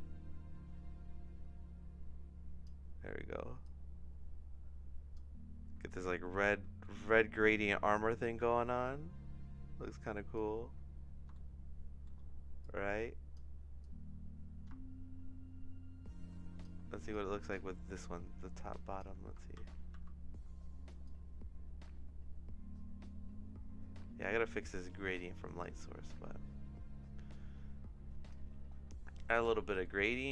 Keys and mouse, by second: 3.7-5.1 drag, 6.0 shift+middle click, 6.8 middle click, 8.0-10.3 drag, 11.3 shift+middle click, 12.6 click, 13.8-16.6 drag, 17.1 click, 18.0-19.0 drag, 19.5 ctrl+c, 19.9 ctrl+v, 21.1-24.2 drag, 25.7-28.3 drag, 29.8 middle click.